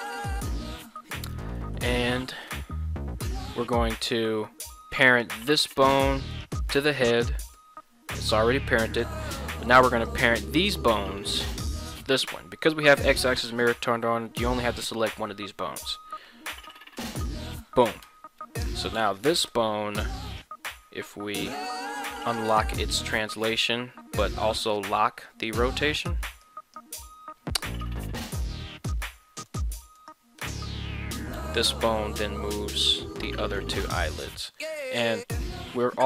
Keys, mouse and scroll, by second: 0.4 middle click, 1.0 scroll down 1, 1.6 middle click, 2.4 KP_1, 4.4 middle click, 5.5-7.5 shift+middle drag, 7.5 ctrl+p, 9.0 middle click, 10.0 right click, 16.4 ctrl+p, 18.0 Tab, 18.6 right click, 19.0 middle click, 19.4 g, 20.3 right click, 21.9 click, 22.2 click, 23.1-23.5 drag, 24.2-24.9 drag, 25.4-25.9 drag, 26.4-26.8 drag, 28.9 g, 30.0 right click, 30.4 g, 33.6 right click.